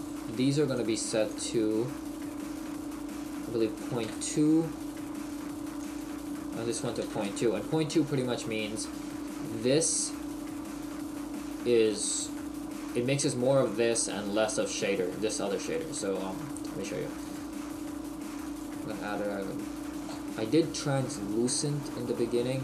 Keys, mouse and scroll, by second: 1.6 click, 5.8 click.